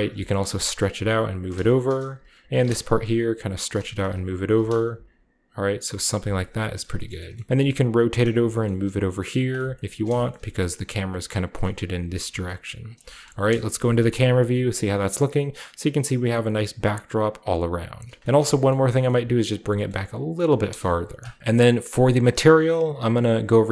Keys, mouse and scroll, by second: 0.5 r, 0.9-2.0 drag, 0.9 g, 1.6-2.8 shift+scroll up 1, 2.4 alt+click, 2.8 typing, 2.8 middle click, 3.7 click, 4.9 g, 6.0 click, 6.1 Tab, 6.2-8.0 middle drag, 6.2-8.0 scroll down 1, 7.5 r, 7.5 z, 8.2 click, 8.4 g, 9.5 a, 9.6-10.6 scroll up 1, 10.6 typing, 11.6 click, 11.8-13.4 typing, 12.8 middle drag, 12.9 shift+click, 14.9 scroll down 1, 15.4-16.9 right drag, 16.5 g, 16.7 scroll down 1, 16.9-18.4 drag, 18.0 middle click, 18.4-19.9 shift+scroll down 1, 18.7 shift+middle click, 19.0 middle click, 19.1 g, 19.5-20.6 drag, 19.9 g, 20.7 KP_0, 21.2 click, 21.4 ctrl+b, 21.8 ctrl+click, 22.1-23.6 scroll up 1.